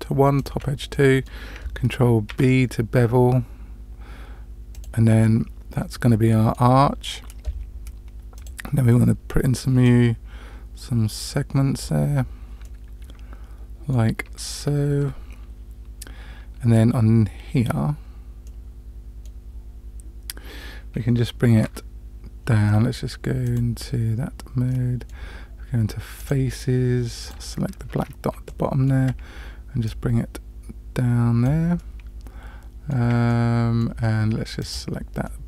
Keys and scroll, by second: 2.3 ctrl+b, 14.5 Tab, 21.6 Tab.